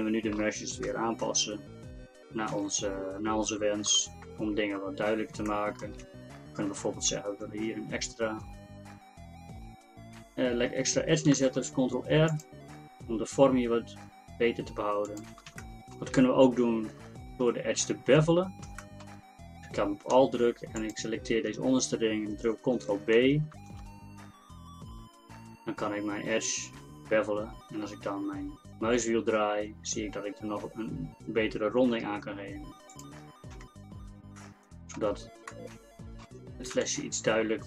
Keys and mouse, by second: 0.9 KP_1, 2.6 KP_4, 2.6 KP_3, 3.6 middle click, 4.4 Tab, 6.3 Tab, 11.4 ctrl+r, 15.6-22.6 middle drag, 23.6 ctrl+b, 33.3 middle click, 33.6 Tab, 36.9 KP_1.